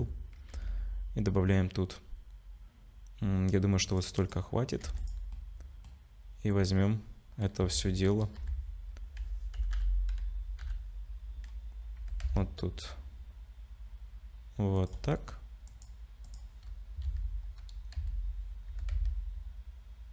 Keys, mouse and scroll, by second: 0.5 ctrl+r, 4.8 2, 5.0 click, 5.3 middle click, 7.6 KP_3, 8.4 KP_1, 9.6 /, 9.8 /, 10.6 /, 12.0 g, 15.1 middle click, 15.7 click, 16.3 click, 17.0 KP_3, 18.0 KP_1, 18.7 g.